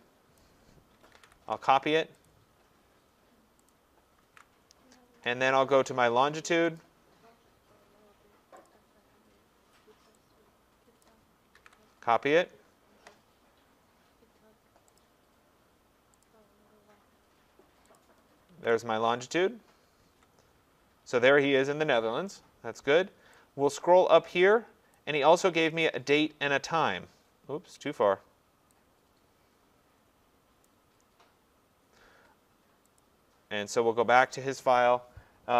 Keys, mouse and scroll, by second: 0.4 click, 1.2 ctrl+c, 2.3 click, 3.7 click, 4.3 ctrl+v, 6.8 click, 8.7 click, 11.0 click, 11.6 ctrl+c, 15.0 click, 16.4 ctrl+c, 16.4 click, 18.0 click, 18.5 ctrl+v, 20.1 Tab, 24.9 click, 30.6 click, 33.0 click, 34.3 click.